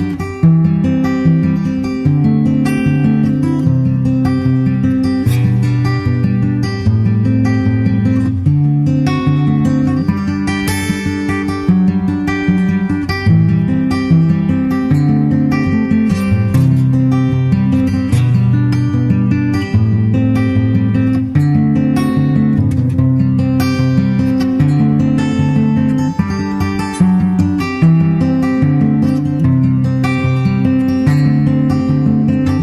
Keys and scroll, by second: 3.6 super+Tab, 3.9 super+Tab, 14.8 super+Right, 20.7 super+Right, 22.2 super+s.